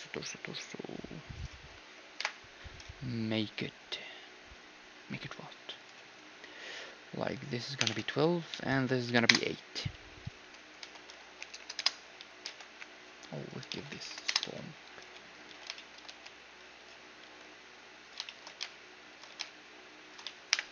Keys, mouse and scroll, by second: 2.2 F6, 10.9 r, 12.2 z, 12.5 r, 13.6 r, 14.7-20.3 middle drag, 14.7 z, 15.0 s, 15.5 z, 16.1 g, 17.2 s, 18.5-20.7 typing.